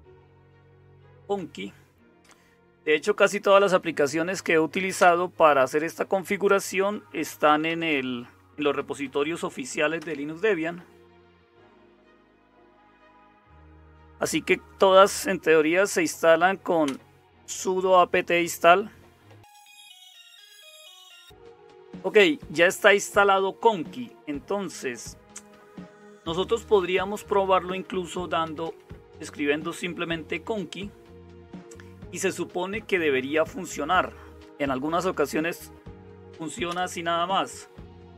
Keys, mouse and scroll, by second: 0.0-38.1 typing, 5.0 Return, 10.0 Return, 16.8 Return, 36.6 Return.